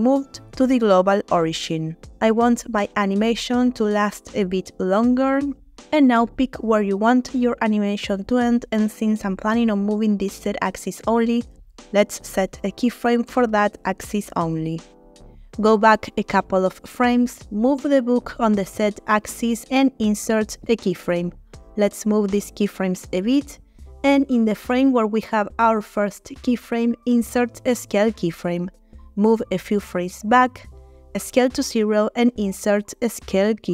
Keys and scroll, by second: 4.4-4.8 typing, 5.1 Return, 9.0 g, 9.2 z, 10.4 Escape, 17.5 g, 17.7 z, 23.2 g, 28.0 i, 31.9 s, 32.9 0.